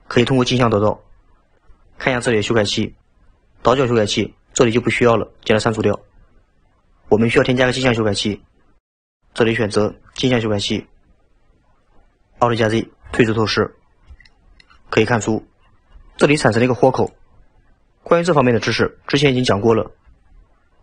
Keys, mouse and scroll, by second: 5.9 click, 7.9-11.0 drag, 13.1 alt+z, 13.7-14.2 scroll up 2, 14.2-20.0 shift+middle drag.